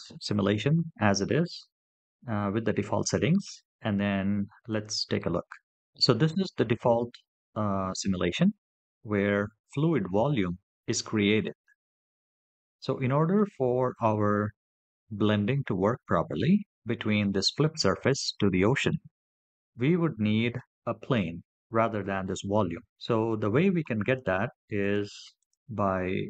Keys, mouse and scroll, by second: 4.5 click, 5.8 click, 9.0 scroll up 2, 9.5-11.4 middle drag, 11.9-12.8 middle drag, 18.2-18.7 scroll down 1, 18.7-20.3 middle drag, 24.6 click.